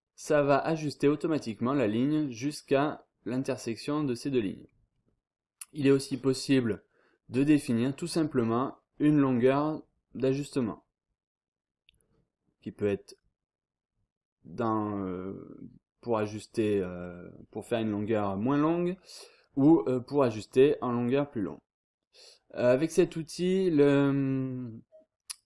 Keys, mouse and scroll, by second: 1.4 click, 2.4-3.0 scroll down 1, 3.3-3.8 scroll up 1, 4.3-4.6 scroll up 2, 4.6 scroll down 2, 4.9-5.5 scroll up 2, 5.9 click, 7.4 click, 10.3-10.8 scroll up 2, 21.4-22.0 scroll down 2.